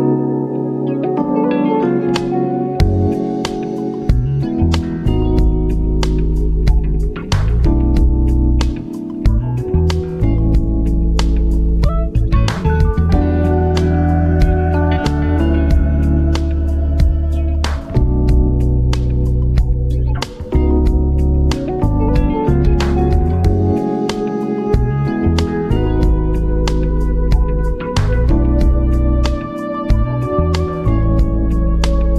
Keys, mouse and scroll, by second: 0.4 click, 3.3 BackSpace, 6.4-8.0 typing, 11.5 click, 14.3 click, 17.6 click, 22.1-31.4 drag.